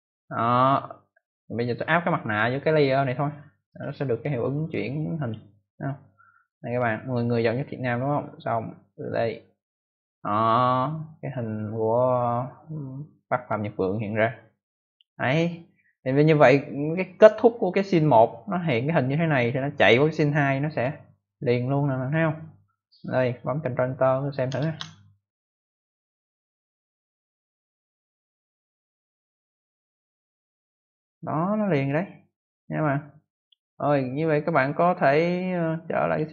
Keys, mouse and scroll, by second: 3.6 right click, 5.1 click, 6.0 click, 19.7 click, 20.6 click, 24.5 ctrl+Return, 33.3 click, 36.0 click.